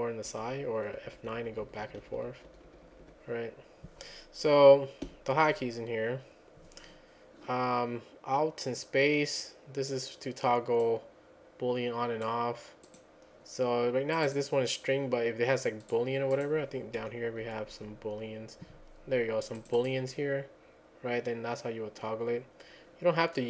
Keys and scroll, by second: 0.3 F10, 0.5 F10, 1.0 F9, 1.2 F9, 1.4 F9, 1.7 F10, 1.8 F10, 2.0 F10, 2.5 F9, 2.7 F9, 3.0 F9, 5.0 F10, 17.0 Page_Down, 17.4 Page_Down, 17.7 Page_Down.